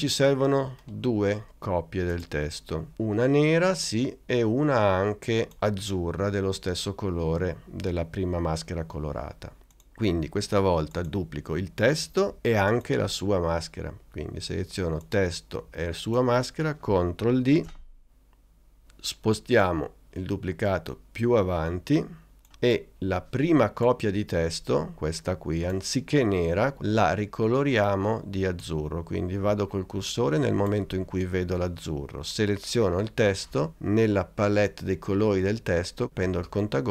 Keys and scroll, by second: 17.6 super+d.